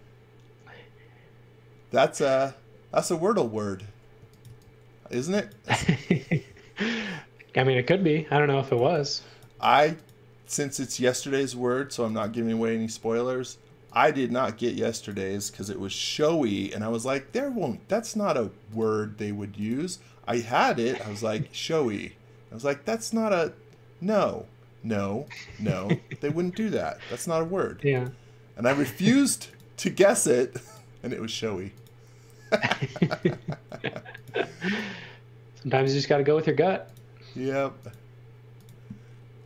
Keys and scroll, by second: 4.2 x, 4.5 v, 5.2 x, 5.7 space, 8.3-9.5 typing, 11.7-12.7 typing, 17.1 r, 25.5 space, 27.3 r, 31.3 space, 33.2 r.